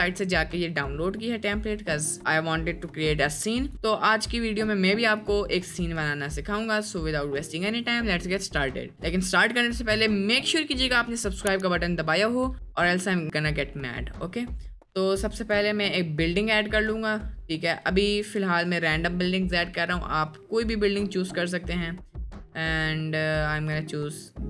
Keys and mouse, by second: 3.5 click, 16.6-17.3 drag.